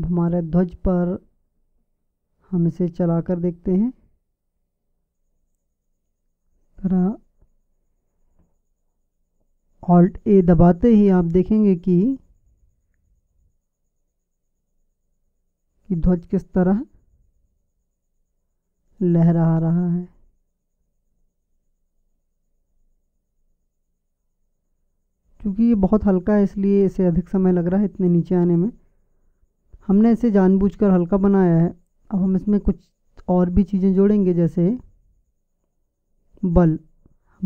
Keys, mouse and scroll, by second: 0.1-2.1 drag, 6.1-8.0 drag, 9.7-11.7 drag, 19.5-24.8 typing, 31.9-33.6 drag.